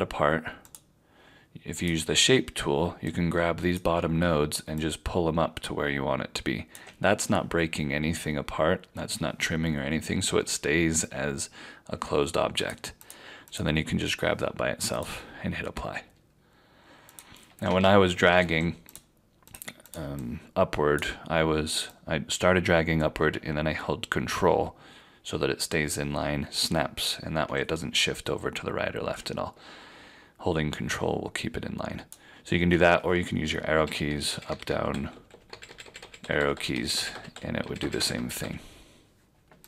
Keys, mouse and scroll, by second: 12.6 ctrl+click, 17.8 ctrl+z, 18.3 ctrl+z, 19.5 click, 33.6 Down, 34.0 Down, 34.3 Down, 34.4 Down, 34.7 Down, 34.9 Up, 35.1 Up, 35.3 Up, 35.5 Down, 35.6 Down, 35.8 Down, 36.0 Down, 36.2 Up, 36.4 Up, 36.5 Up, 36.7 Down, 36.9 Down, 37.1 Down, 37.3 Up, 37.5 Down, 37.8 Down, 37.9 Down, 38.1 Down, 38.4 Up.